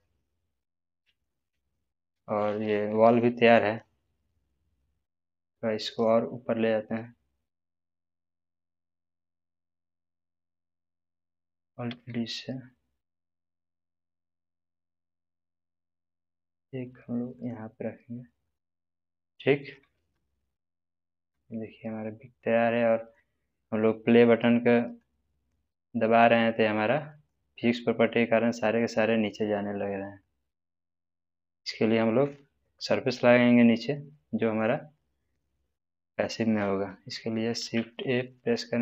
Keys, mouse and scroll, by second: 2.9-3.2 scroll up 1, 3.7-6.1 middle drag, 5.8 scroll up 1, 7.0-8.5 middle drag, 10.6 click, 11.8 alt+d, 17.3 click, 19.0-19.9 scroll down 1, 19.9 space, 22.4-23.3 middle drag, 24.9-27.5 drag, 29.0 middle click, 30.2-31.1 drag, 33.5-34.7 middle drag, 37.6 shift+a.